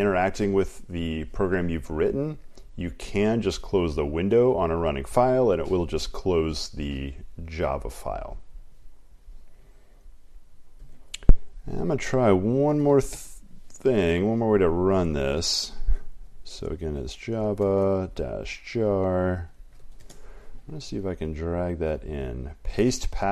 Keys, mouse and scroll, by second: 0.0-23.3 typing, 4.5 click, 11.1-12.9 drag, 13.6 super+Return, 15.6-17.0 ctrl+scroll, 17.0 ctrl+scroll.